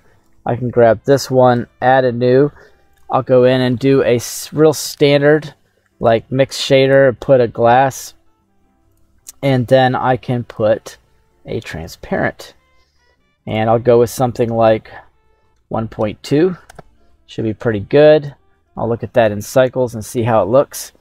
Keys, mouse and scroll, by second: 0.3 right click, 1.4 click, 2.9-6.2 drag, 6.8-9.1 drag, 10.4-11.9 drag, 12.4-13.4 scroll down 2, 13.4-16.7 drag, 18.7 click.